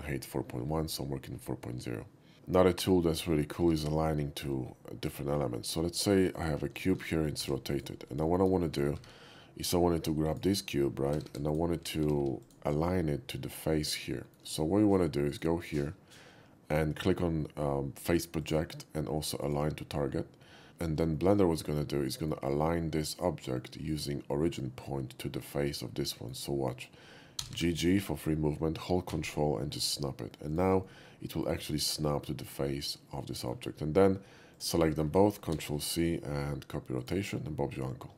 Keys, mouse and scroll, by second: 2.6 shift+middle click, 3.2 shift+middle click, 3.7 shift+a, 6.4 click, 6.8 middle click, 7.4 r, 7.7 click, 9.0 shift+a, 10.3 click, 11.1-12.2 typing, 11.5 click, 12.4 click, 12.7 middle click, 14.3 shift+middle click, 15.3 shift+click, 18.4 click, 19.4 click, 21.2 shift+middle click, 21.6-22.3 shift+middle drag, 25.9 middle drag, 26.2 middle click, 27.4 g, 27.6 g, 30.5 ctrl+click, 30.8-31.5 ctrl+middle drag, 32.2-33.5 ctrl+middle drag, 34.5 shift+click, 35.5 ctrl+c, 37.0 click.